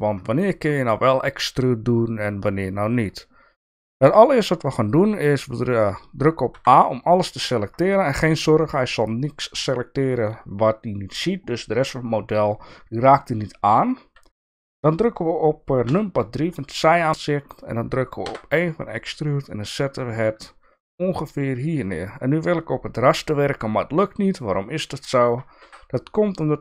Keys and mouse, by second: 6.5 a, 15.8 KP_3, 16.6 shift+middle click, 18.3 e.